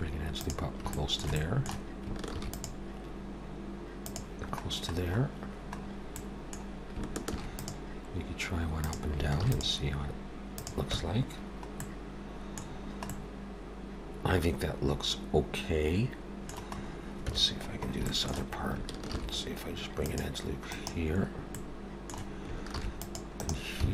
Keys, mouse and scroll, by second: 0.9 shift+middle click, 1.4 middle click, 2.3 ctrl+r, 4.6-5.4 scroll down 2, 5.8-6.2 scroll up 1, 6.2 middle click, 7.3 ctrl+r, 9.4 ctrl+r, 11.0 Tab, 11.8 middle click, 12.7 scroll down 2, 13.1 middle click, 16.7 scroll up 2, 17.2 Tab, 17.7 scroll up 1, 18.0 shift+middle click, 19.0 ctrl+r, 21.5 middle click, 22.7 ctrl+r.